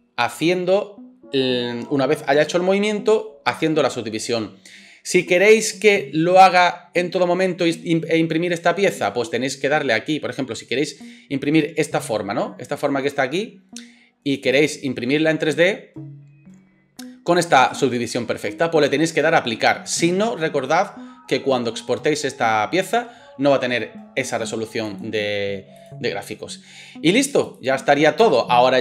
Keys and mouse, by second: 25.9-27.3 middle drag, 27.3-28.8 drag, 28.2 space.